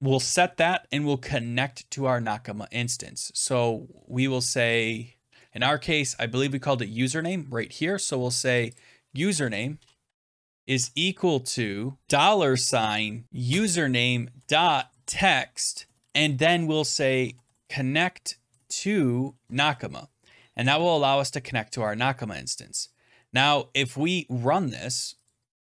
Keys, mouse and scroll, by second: 2.7 Return, 5.5 scroll, 7.1 click, 7.2 click, 7.6 scroll, 8.7 click, 9.0-10.5 typing, 11.7-12.6 typing, 13.2 Down, 13.4 Return, 14.0-15.5 typing, 15.7 Return, 16.9-18.9 typing, 19.3 Tab, 20.7 ctrl+s, 23.1 scroll, 25.2 click, 25.4 scroll up 5.